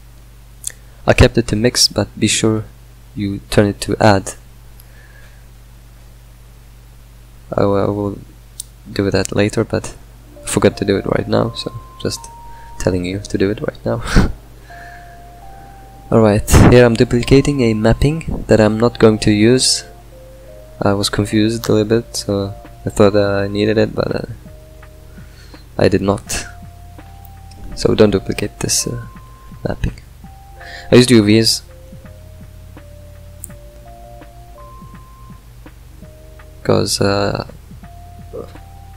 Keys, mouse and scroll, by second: 5.7 drag, 13.5 click, 15.0 click, 16.0 shift+d, 18.4 click, 19.9 drag, 21.9 click, 28.7-29.2 middle drag, 29.2 click, 31.0 click, 34.1 click.